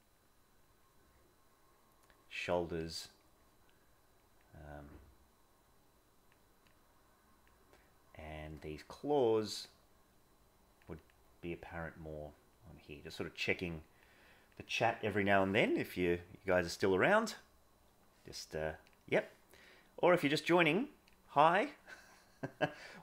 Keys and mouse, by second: 0.0 click, 0.5 click, 0.9-2.7 drag, 2.8 click, 4.1 click, 4.5 click, 4.8-6.2 drag, 7.2 click, 7.6 click, 8.8 click, 9.9 click, 10.9 click, 11.3 click, 12.5 click, 13.3 click, 13.6 click, 14.3 click.